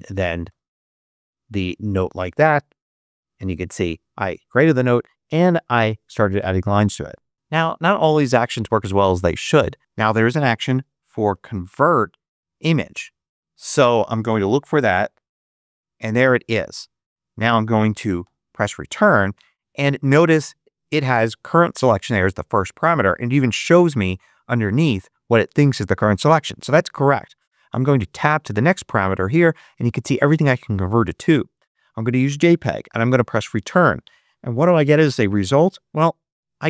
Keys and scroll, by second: 0.4 Return, 10.3-12.1 typing, 14.1-15.4 typing, 18.1 Return, 28.1 Tab, 33.3 Return.